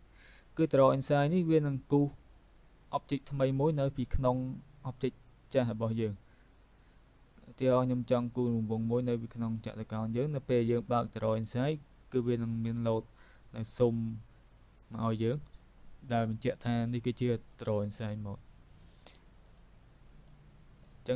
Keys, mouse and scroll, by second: 0.2 double click, 6.4 click, 7.8 click, 19.7 alt+click.